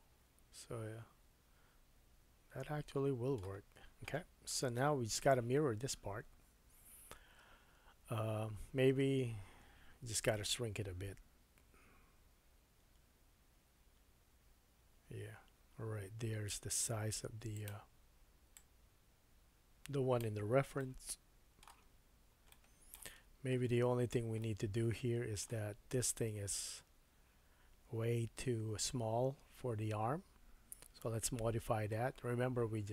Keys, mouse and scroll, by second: 3.9-4.6 scroll down 1, 4.6 KP_1, 6.2 scroll up 1, 6.4-7.0 scroll down 3, 9.1 scroll up 1, 11.1 s, 17.6 middle click, 18.5-21.9 drag, 20.8 middle click, 21.9-22.5 scroll up 3, 22.5 middle click, 23.2 scroll up 1, 23.9-24.4 scroll down 4, 24.4 middle click, 25.7-32.9 drag, 25.7-26.2 scroll up 2, 28.9-31.0 scroll up 1, 31.0 Tab, 31.5-32.0 scroll up 1.